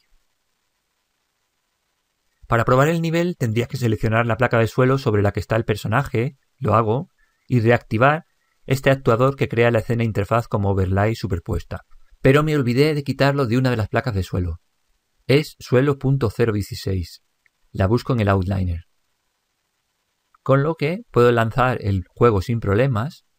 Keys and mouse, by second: 2.0-3.9 middle drag, 4.8-6.4 right drag, 11.4 click, 14.3 click, 20.5 click, 23.3 p.